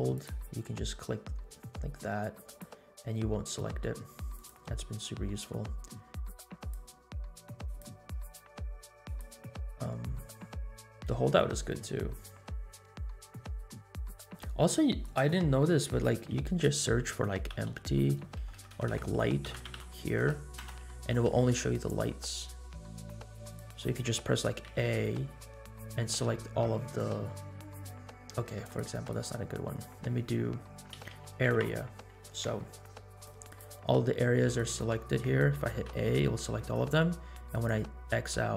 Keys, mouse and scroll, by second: 2.6 click, 4.4 click, 6.7 click, 7.7 click, 9.0-13.8 drag, 14.3 click, 15.0-23.5 drag, 18.5 BackSpace, 18.8 BackSpace, 24.8 a, 28.6 click, 29.1-33.2 drag, 33.5 click, 34.5 click, 35.9 a, 37.5 click.